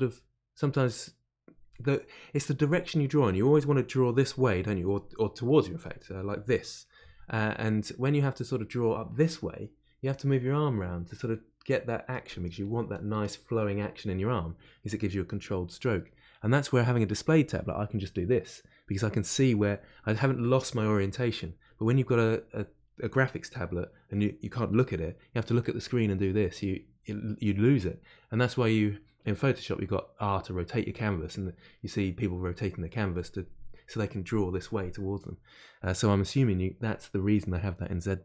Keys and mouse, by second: 38.0-38.2 middle drag.